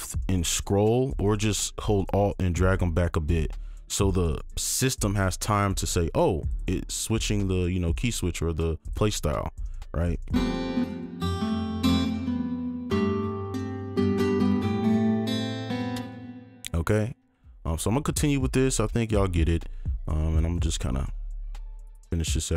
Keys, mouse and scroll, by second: 0.9-1.4 scroll up 1, 1.4 scroll down 1, 2.0 alt+click, 4.3 right click, 9.6-10.1 scroll up 1, 10.1 scroll down 1, 10.8 space, 12.8-14.8 scroll down 1, 15.9 space, 16.5 ctrl+click, 18.5-19.0 alt+scroll up 1, 19.0-20.2 scroll down 2, 19.0 right click, 20.5 ctrl+click, 20.9 click.